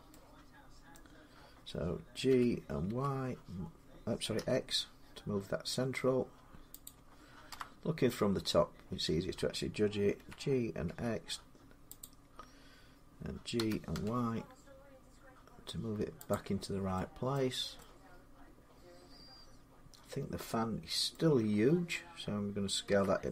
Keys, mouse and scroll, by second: 0.7 middle click, 2.0-2.6 typing, 2.2-5.7 middle drag, 4.1 x, 5.9 g, 6.6-10.1 drag, 7.3 7, 9.9-10.6 typing, 11.8 click, 13.3-14.2 typing, 16.1 click, 16.9 middle click, 17.0-17.4 scroll down 5, 17.0 g, 17.1 middle click, 20.9 middle click, 21.9 scroll, 22.6 s.